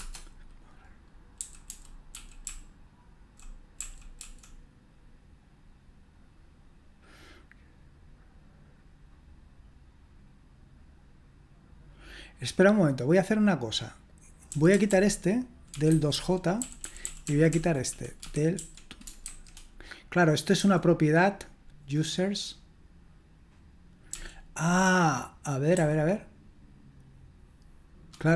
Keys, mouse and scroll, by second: 0.0-4.2 typing, 14.7-19.2 typing, 20.8 typing, 24.1 k, 25.7 h.